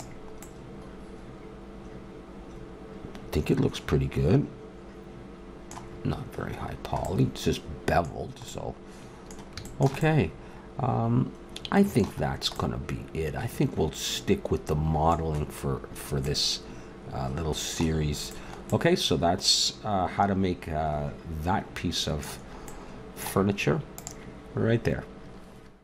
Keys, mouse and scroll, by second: 0.4-2.4 middle drag, 6.7-14.5 middle drag, 15.8 middle click, 18.1 middle click, 19.2-20.5 middle drag, 22.7-24.0 middle drag.